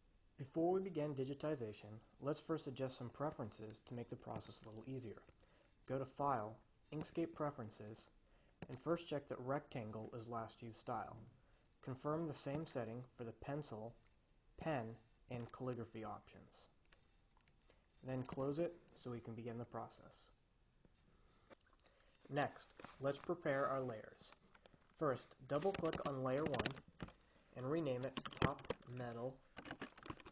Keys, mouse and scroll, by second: 5.1 click, 7.4 click, 9.2-9.6 drag, 13.2 click, 15.2 click, 15.8 click, 18.7-19.4 drag, 21.5 Escape, 21.5 click, 25.9-27.2 drag, 28.2-30.3 typing.